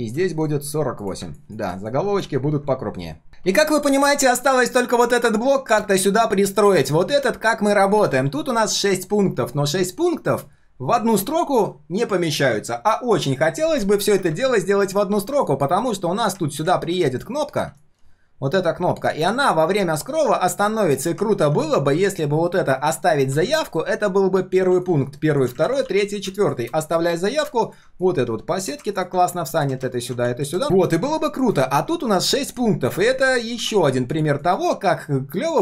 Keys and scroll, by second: 0.3 ctrl+alt+v, 9.9 ctrl+shift+3, 11.0 ctrl+shift+3, 25.6 ctrl+d, 25.8 ctrl+d, 30.6 ctrl+shift+4.